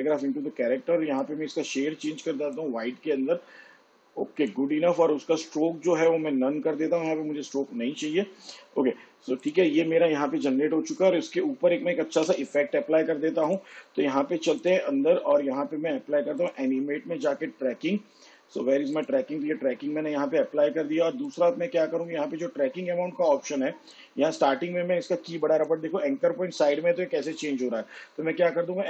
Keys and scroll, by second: 13.1 v, 27.8 ctrl+z.